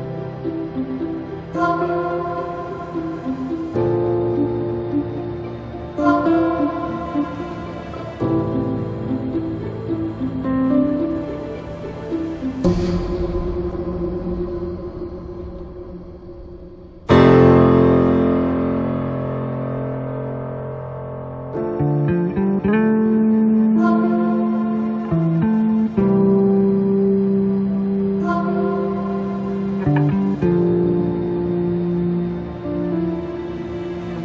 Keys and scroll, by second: 15.2 Escape, 17.8 space.